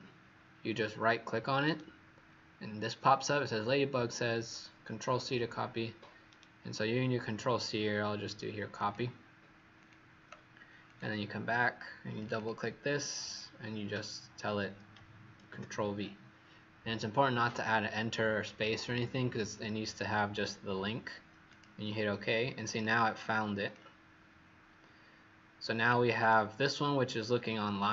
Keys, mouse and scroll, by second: 12.3 click, 15.4 ctrl+v, 21.4 click.